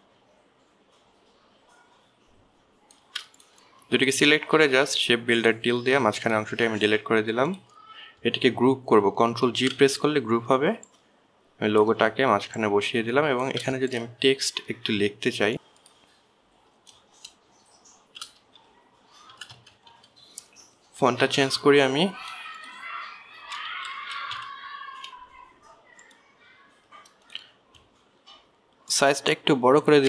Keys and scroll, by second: 10.9 ctrl+g, 15.5 shift+BackSpace, 19.2 shift+c, 19.7 shift+o, 20.7 f, 21.1 e, 22.4 a, 24.8-25.7 typing.